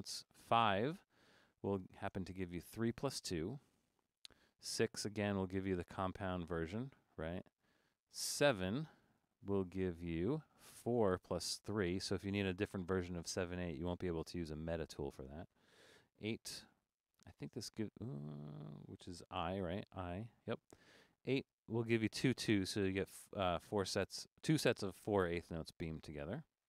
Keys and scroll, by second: 0.3 t, 0.8 t, 2.7 typing, 4.8-5.6 typing, 7.2 typing, 9.1-9.9 typing, 16.4-17.1 i, 18.7-20.4 typing, 22.2 typing.